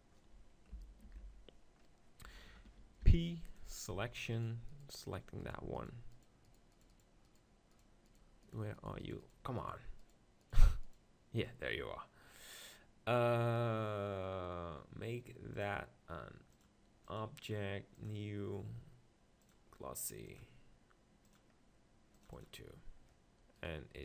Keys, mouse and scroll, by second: 1.0 ctrl+l, 1.0 click, 3.0 p, 3.9 Tab, 4.4 click, 4.6-17.2 right drag, 17.2-24.0 drag, 23.7-24.0 right drag.